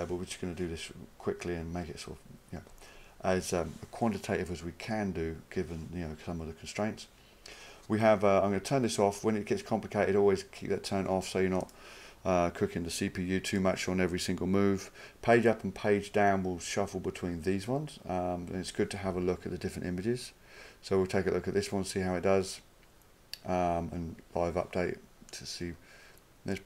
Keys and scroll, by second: 19.1 Page_Down.